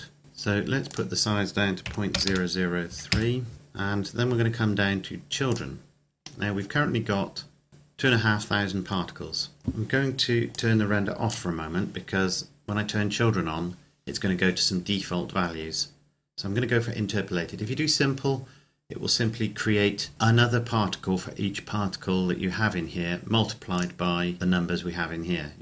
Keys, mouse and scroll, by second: 1.1 click, 2.1 KP_Decimal, 2.4 KP_0, 3.1 KP_3, 3.4 KP_Enter, 3.8-4.5 scroll down 1, 5.7 click, 6.4-7.7 scroll up 1, 9.6 click, 10.8 click, 23.8 click.